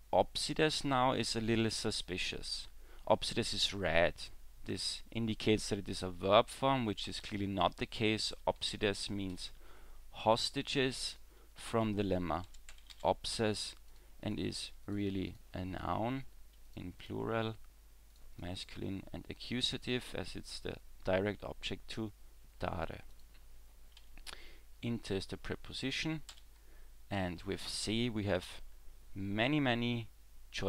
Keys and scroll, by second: 7.1 w, 24.0 w, 26.3 w.